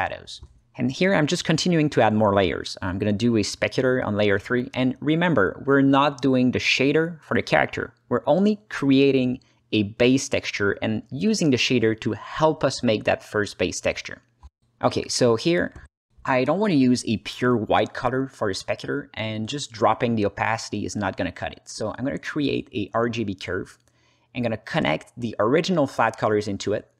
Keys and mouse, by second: 0.9 click, 2.2 click, 3.8 shift+a, 6.7-7.5 drag, 8.5 click, 9.3 h, 10.1-11.0 drag, 11.5-12.2 drag, 13.5 z, 14.4 alt+middle click, 15.3 ctrl+middle click, 15.7 middle drag, 16.8 alt+middle click, 17.3 ctrl+alt+middle click, 18.1 click, 19.0 shift+a, 23.2 ctrl+space, 23.7 click, 24.6-25.7 drag, 26.0 click, 26.8 click.